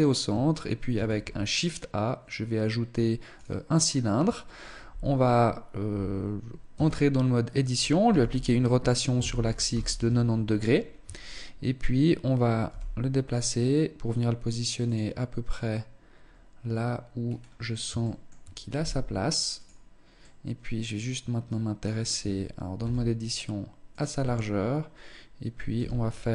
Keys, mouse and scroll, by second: 0.5 shift+a, 6.3 Tab, 7.6 r, 10.3-10.7 scroll up 3, 10.4 Tab, 12.2 g, 14.5 click, 16.7-17.7 scroll up 2, 17.1 shift+middle click, 17.7 g, 19.7 middle click, 21.7 Tab, 22.3 s, 23.8 Tab, 25.3 z.